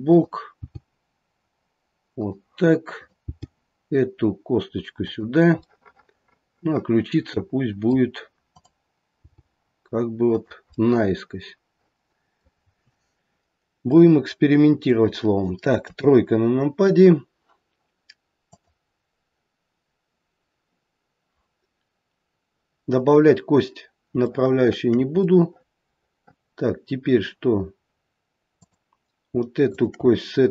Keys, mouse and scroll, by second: 0.0 click, 0.0 g, 0.5 g, 2.9 click, 3.2 g, 5.6 middle click, 5.8 middle click, 6.5 middle click, 8.4 click, 9.2 g, 10.7 middle click, 11.1 middle click, 12.5-14.0 scroll down 2, 14.0 middle click, 14.0-14.4 scroll down 1, 14.4 middle click, 14.6 middle click, 15.8 KP_3, 16.3-17.6 scroll up 1, 17.6-18.4 scroll up 2, 18.4 click, 24.3 shift+middle click, 24.9 shift+middle click, 25.1 middle click, 25.3 middle click, 26.3 middle click, 26.7 middle click, 27.1 middle click, 28.6 click, 29.7 shift+click.